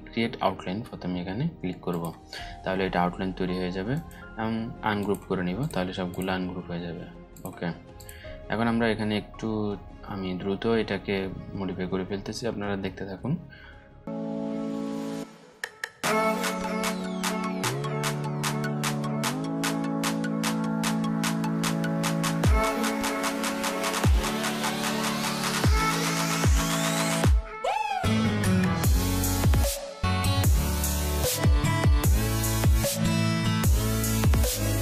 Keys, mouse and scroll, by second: 1.4 click, 3.4 right click, 4.5 click, 8.3-9.0 alt+scroll up 2, 9.0-10.6 scroll up 2, 10.6-11.2 scroll up 1, 12.2-13.1 alt+scroll up 2, 13.1-13.4 scroll up 1, 14.1 click, 15.5 click, 17.4 alt+scroll up 1, 17.8 click, 18.6 click, 19.6 ctrl+click, 22.1 alt+scroll down 1, 23.0 click, 23.1 alt+scroll up 1, 23.6-24.5 drag, 29.6-30.8 drag, 33.0 click, 33.7-34.1 alt+scroll down 2, 34.3-34.7 alt+scroll up 2, 34.4 click.